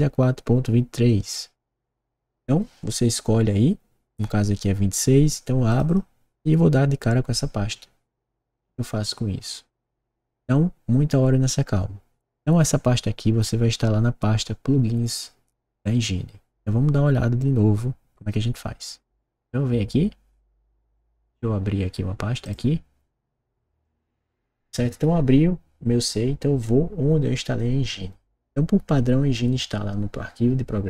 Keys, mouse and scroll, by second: 5.6 click, 5.8 click, 23.7-25.0 drag, 30.8 click.